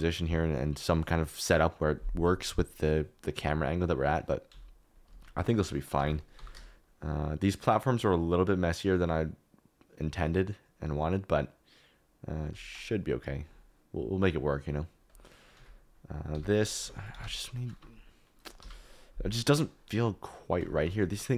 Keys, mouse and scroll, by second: 4.5 s, 5.1 Escape, 5.5 s, 5.9 Escape, 6.3 g, 15.5 s, 16.3 Escape, 16.8 s, 16.9 z, 17.1 -, 17.2 1, 18.6 Escape, 20.6 Tab, 20.8 3, 21.0 click.